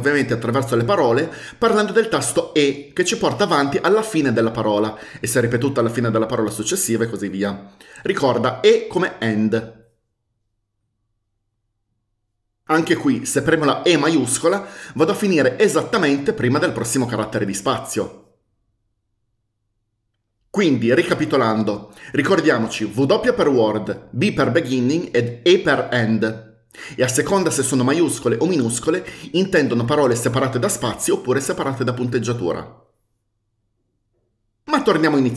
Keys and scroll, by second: 3.7-4.5 typing, 5.8 typing, 7.2-8.2 typing, 14.4 shift+e.